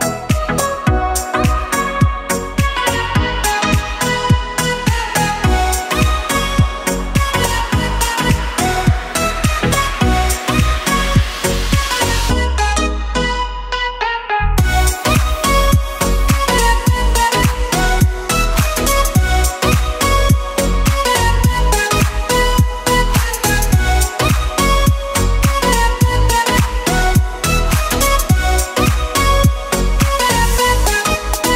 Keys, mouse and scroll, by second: 0.6 click, 1.1-2.0 scroll up 10, 3.2 click, 4.7 click, 6.8 click, 10.1 g, 14.6 click, 15.3 click, 18.2 click, 19.1 shift+a, 23.2 s, 28.6 click, 30.3 click, 31.3 g.